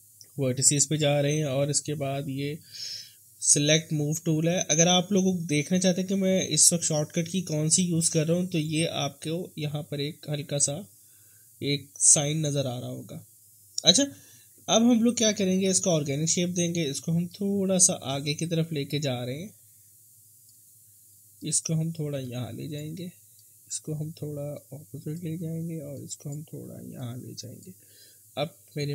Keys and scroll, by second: 6.5 s, 8.1 w, 19.0 s.